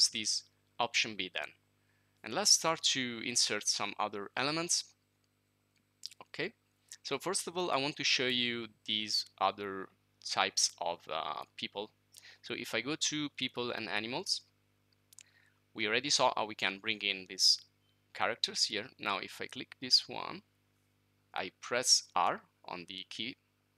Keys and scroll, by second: 2.2-2.9 typing.